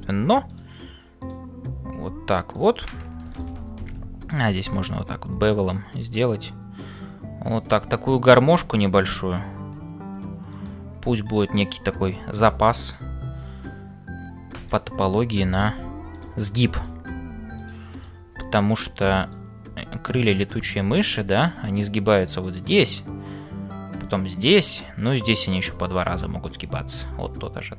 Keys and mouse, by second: 0.0-27.7 typing, 4.5 ctrl+b, 12.7 shift+middle click, 19.2 click, 21.2 middle click.